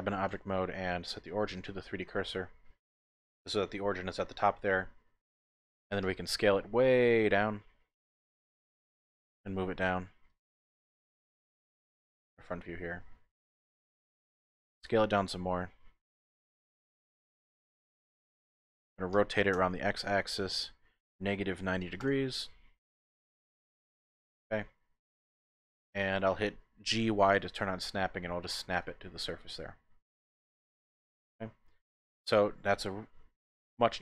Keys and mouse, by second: 0.3 q, 2.4 middle click, 2.9 typing, 3.6-4.8 drag, 6.0 s, 8.3 click, 9.3 g, 9.4 z, 10.3 click, 11.3 KP_1, 12.2 shift+middle click, 13.6 shift+click, 14.8 s, 16.4 click, 16.5 typing, 16.9 click, 17.9 middle click, 19.1 r, 19.5 x, 21.5 KP_Subtract, 21.7 KP_9, 21.8 KP_0, 22.0 KP_Enter, 23.1 KP_Decimal, 24.1 click, 24.3 middle click, 24.3 typing, 24.8-26.1 drag, 26.9 g, 27.1 y, 28.7 ctrl+click, 29.1-32.6 drag, 33.3 Tab, 33.8 Tab.